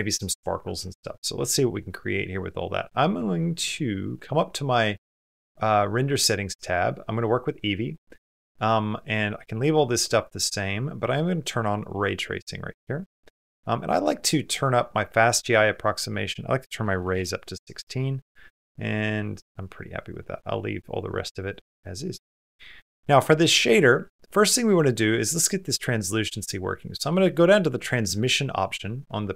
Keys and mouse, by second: 24.3 middle click, 26.2 middle click, 26.9 middle click, 28.5-29.3 middle drag.